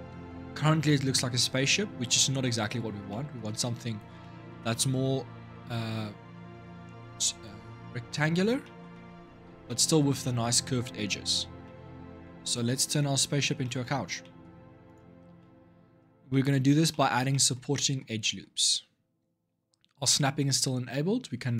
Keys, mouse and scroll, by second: 2.3-2.8 scroll down 3, 2.8-3.7 middle drag, 3.7 scroll up 3, 4.0-7.6 middle drag, 8.4-9.2 shift+middle drag, 9.2 scroll up 3, 9.4-11.0 middle drag, 11.0-11.4 scroll down 5, 11.4-13.1 middle drag, 13.1 scroll down 2, 13.3-14.0 shift+scroll up 3, 13.4-13.8 shift+middle drag, 14.0 middle drag, 14.2-14.6 scroll down 1, 14.6 click, 14.9 Tab, 15.1-16.4 middle drag, 16.4 scroll up 2, 16.7-21.1 middle drag, 21.3-21.5 drag.